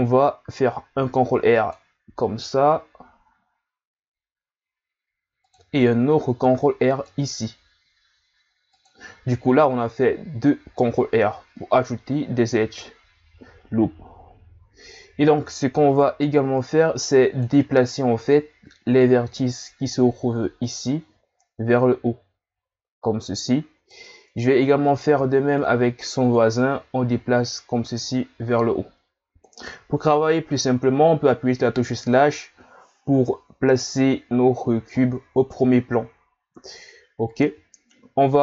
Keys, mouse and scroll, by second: 0.9 ctrl+r, 6.4 ctrl+r, 15.9 right click, 16.2 b, 19.9 click, 24.9 right click, 25.2 b, 26.6 click, 32.1 KP_Divide.